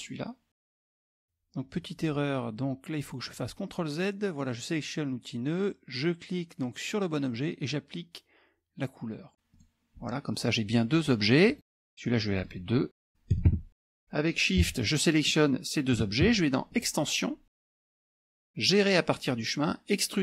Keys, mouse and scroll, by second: 0.9 click, 1.8 click, 2.9 ctrl+z, 3.9 click, 6.5 click, 9.6 click, 11.5 click, 12.4 click, 13.4 KP_2, 13.5 KP_Enter, 15.4 shift+click, 16.8 click.